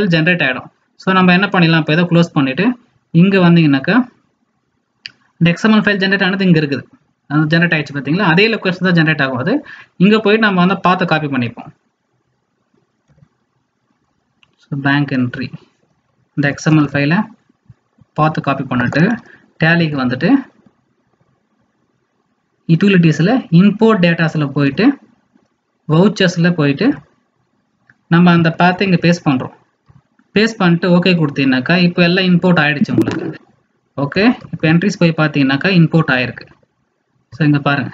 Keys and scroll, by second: 16.6 ctrl+c, 28.6 ctrl+alt+v.